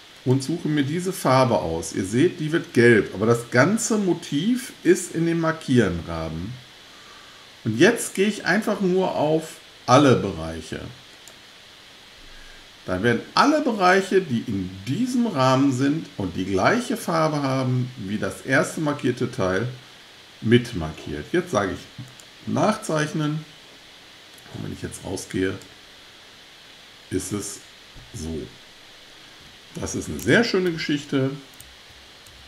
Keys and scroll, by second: 30.7 super+z, 31.6 super+z, 32.3 super+z.